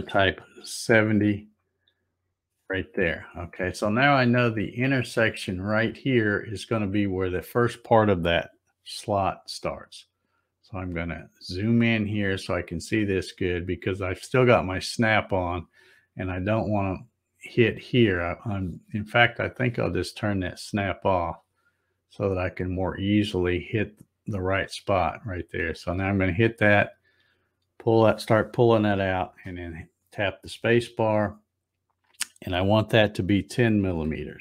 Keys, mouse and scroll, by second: 7.2 click, 9.8-11.7 scroll up 10, 12.2-12.7 scroll up 2, 21.1 click, 25.7-29.2 drag, 29.2 space.